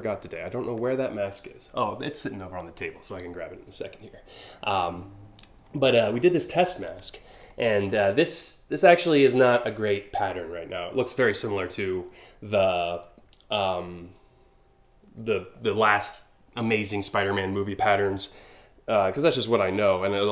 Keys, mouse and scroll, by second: 5.7 scroll up 1, 6.5 click, 7.0-7.4 scroll up 3, 8.5 click.